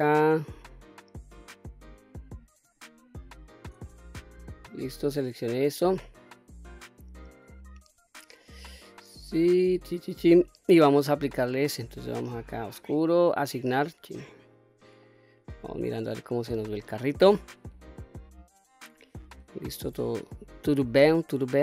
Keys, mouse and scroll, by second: 0.6 shift+click, 1.2 shift+click, 1.7 shift+click, 2.5 shift+click, 3.1 shift+click, 3.7-4.6 middle drag, 5.3-5.7 scroll down 1, 5.7-7.3 middle drag, 7.6-8.1 scroll up 2, 8.2-9.8 middle drag, 11.1-12.5 scroll up 2, 12.5 click, 13.3 click, 13.9-14.4 scroll down 1, 14.4 click, 14.9-19.2 middle drag, 19.5-19.8 scroll up 1, 20.0-21.2 scroll down 1, 21.2-21.6 middle drag.